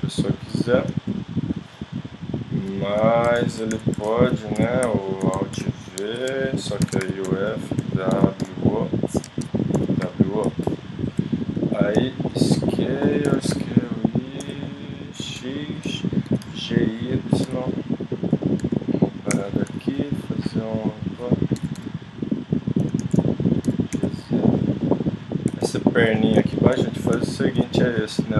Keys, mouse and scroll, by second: 0.5 b, 3.4 middle click, 3.7 z, 4.1 middle click, 4.6 KP_5, 5.6 alt+v, 6.8 ctrl+Tab, 8.1 w, 9.8 w, 10.6-13.2 middle drag, 11.9 s, 13.3 s, 16.3 g, 17.4 e, 18.6 s, 19.4 middle click, 21.6 click, 21.6 g, 23.0 z, 23.6 g, 28.1 i.